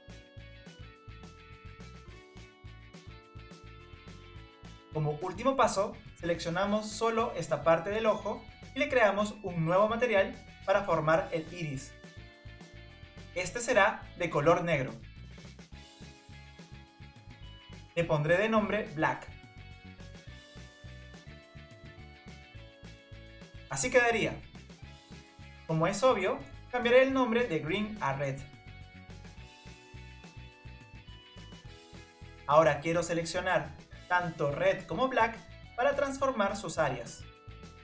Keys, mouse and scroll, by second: 5.9 click, 7.9 click, 9.9 ctrl+KP_Add, 11.8-14.8 drag, 18.6 click, 18.8-20.9 drag, 21.1 click, 23.0 scroll down 2, 23.3-26.2 middle drag, 26.2 KP_1, 27.3 scroll up 2, 28.3 click, 29.5 click, 29.7-32.7 drag, 32.9 shift+click, 33.6 click, 35.6 click, 36.6 click, 36.6 click, 37.0 click.